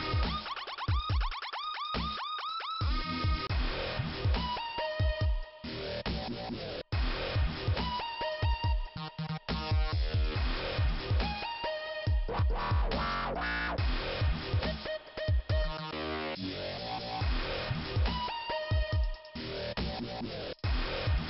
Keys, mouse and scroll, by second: 1.3 click, 3.4 click, 6.0 click, 6.7 click, 7.4-7.8 scroll down 1, 8.8 middle click, 10.1-10.4 scroll up 3, 10.3 click, 10.4 click, 11.6 click, 12.9 click, 14.0 click, 14.3 click, 14.6 click, 15.5 click, 16.7 click, 17.1 click, 17.2 click, 17.8 scroll down 2, 20.1 right click, 20.9 click.